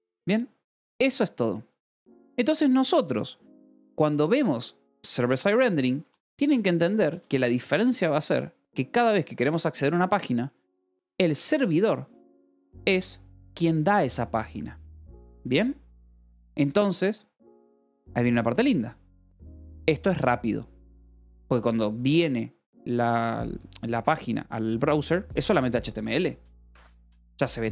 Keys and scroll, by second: 5.4 k, 6.4 shift+v, 6.7 Escape, 7.6 shift+g, 10.5-13.1 typing, 12.0 Escape, 16.1 Escape, 20.1 shift+v, 21.1 Escape.